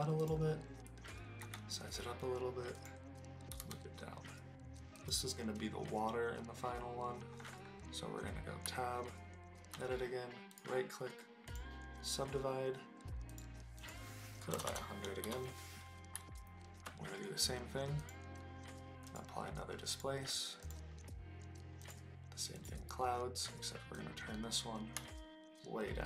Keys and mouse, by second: 0.2 click, 1.4 s, 2.7 click, 3.5 g, 3.6 z, 4.9 click, 8.6 Tab, 10.6 right click, 13.3-15.4 drag, 14.7 KP_0, 16.1 Tab, 18.1-19.2 drag, 19.9 click, 21.9 click, 24.1 middle click, 24.6-26.0 drag.